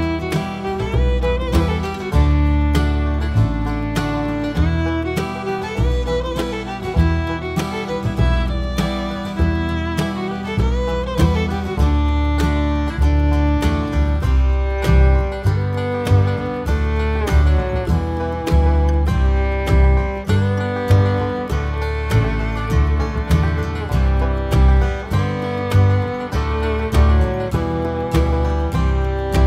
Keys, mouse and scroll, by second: 2.1 click, 2.9 s, 3.1 alt+a, 3.5 scroll down 1, 4.5 click, 5.7 g, 6.6 click, 6.8 g, 7.1 scroll up 1, 9.0 click, 11.0 click, 13.2 click, 13.9 scroll down 1, 14.5 scroll up 2, 15.0 KP_0, 15.3 scroll up 2, 16.8 KP_1, 16.9 KP_0, 17.2 scroll up 1, 17.3 scroll down 1, 18.0 KP_1, 18.3 KP_0, 21.2-26.0 drag, 23.9 scroll up 2, 25.5 scroll up 1, 27.6-28.5 drag, 27.7 scroll down 2, 27.8-28.1 scroll up 2, 28.3 scroll down 2, 28.5 KP_0.